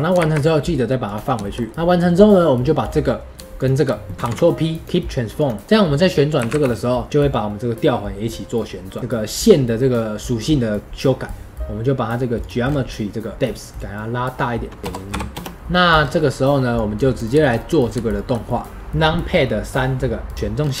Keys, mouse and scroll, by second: 1.3-3.6 shift+middle drag, 4.2 ctrl+p, 5.6-6.5 middle drag, 14.8 click, 15.5-15.9 middle drag, 15.9-16.7 scroll down 1, 16.7 scroll down 1, 16.8 click, 17.3-17.9 shift+middle drag, 17.9 shift+scroll up 1, 18.1-18.7 shift+middle drag, 18.7 KP_3, 20.3 click, 20.5 scroll down 3.